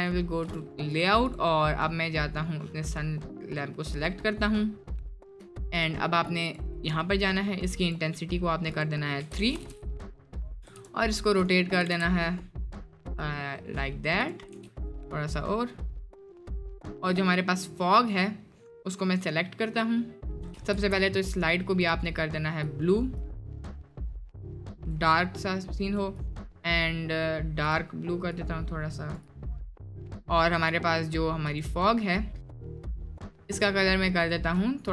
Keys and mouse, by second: 0.0 click, 1.0 click, 1.3 click, 2.4 click, 5.7 click, 7.0-9.6 drag, 10.6 r, 11.8 r, 14.5 r, 17.5 middle click, 18.7-19.3 drag, 20.9 ctrl+z, 21.8 click, 24.8 drag, 26.2 click, 27.6 drag, 32.0 middle click, 32.8 click.